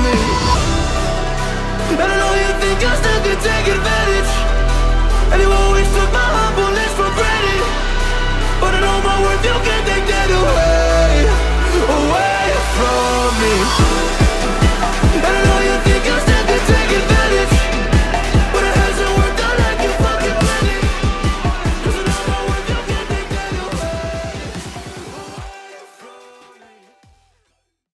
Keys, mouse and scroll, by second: 6.7 c, 7.3 click, 10.2 click, 10.8 ctrl+a, 11.2 ctrl+v, 12.3-14.6 drag, 14.8 Tab, 15.4-16.0 click, 16.3 space, 16.4 click, 16.4-17.4 click, 16.8 space, 17.4 space.